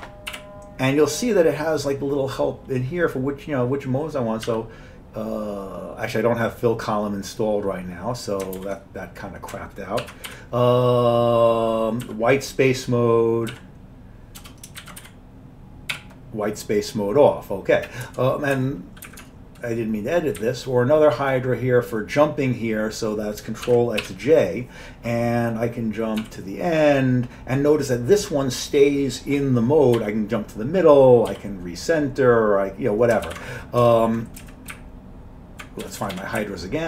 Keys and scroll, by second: 0.0 Up, 0.0 Down, 0.0 Right, 0.0 ctrl+x, 0.4 t, 4.5 c, 8.6 ctrl+g, 10.1 ctrl+x, 10.3 t, 12.1 w, 13.5-16.0 typing, 18.1 Tab, 18.3-21.5 typing, 23.5-24.5 typing, 26.0-26.7 typing, 30.0 m, 31.3 r, 33.1-33.8 typing, 34.4 Down, 34.7 Up, 35.2 Up, 35.5 Up, 35.9 Page_Up, 36.0 Page_Up, 36.2 Page_Up, 36.4 Up.